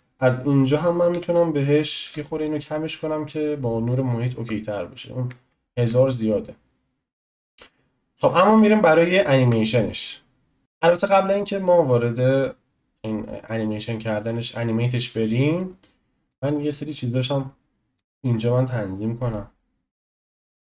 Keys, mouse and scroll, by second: 10.6 click, 11.3 scroll down 2, 12.4 click, 12.4 scroll down 2, 14.2-14.5 scroll down 1, 14.5-15.5 shift+middle drag, 15.5 click, 16.9 click, 19.3-20.7 drag.